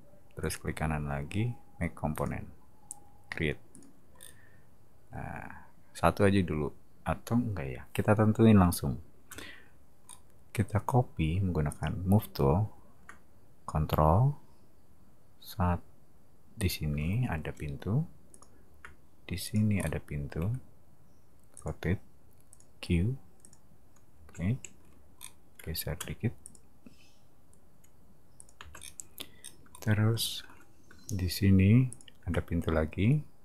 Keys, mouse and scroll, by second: 0.4 right click, 2.1 click, 3.7 click, 4.1 scroll up 1, 9.3 m, 10.0 middle click, 11.7 click, 16.6 click, 18.3 click, 19.4 click, 19.8 middle click, 20.4 q, 21.5 click, 22.5 click, 23.4 click, 24.1 space, 25.1 middle click, 26.0 m, 26.4 click, 28.4 click, 28.6 space, 28.7 middle click, 29.4 middle click, 30.9 m, 31.9 click.